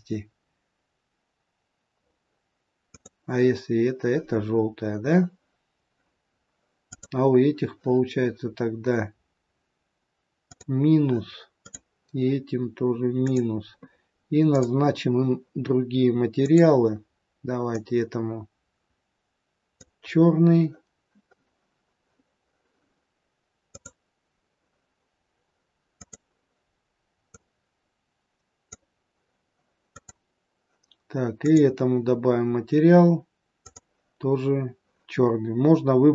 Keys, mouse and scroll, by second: 2.9 click, 6.2-6.9 scroll down 3, 6.7 click, 10.3 click, 11.5 click, 13.2 click, 14.5 click, 16.4 click, 23.7 click, 26.0 click, 29.9 click, 31.4 click, 33.5 click.